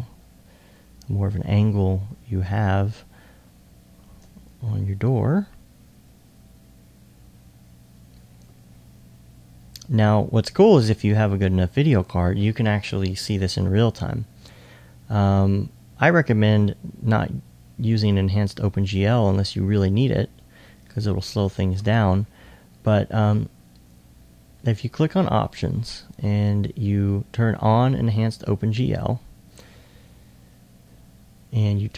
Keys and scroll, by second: 10.8 r, 11.0 r.